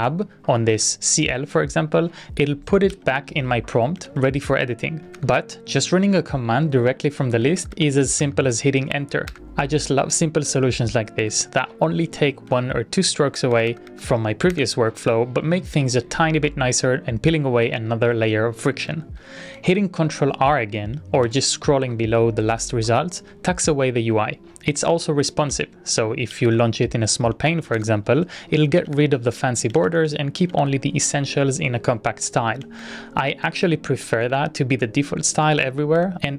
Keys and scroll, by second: 2.9 Tab, 3.8-4.8 typing, 5.4 Return, 5.9 ctrl+r, 7.4 Up, 7.6 Up, 7.7 Up, 8.2 Up, 9.5 Return, 12.7 ctrl+r, 13.3 Up, 13.5 Up, 13.7 Up, 13.9 Up, 14.7 Return, 19.1 ctrl+c, 19.2 Up, 21.5 ctrl+r, 25.3 ctrl+a, 25.5 s, 26.3 ctrl+a, 28.8 ctrl+a, 28.9 k, 29.8 ctrl+a, 33.4 Up, 33.4 Up, 33.6 Up, 34.1 Down, 34.3 Down, 34.5 Down.